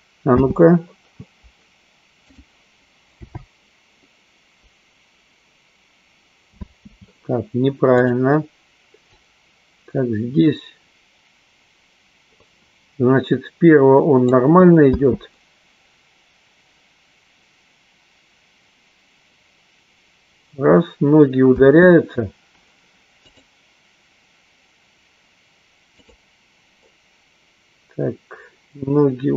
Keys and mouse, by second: 0.4 space, 2.9 click, 3.9 n, 7.4 space, 8.6 click, 9.7-14.9 drag, 15.3 space, 22.6 space, 23.8 click, 26.6 click.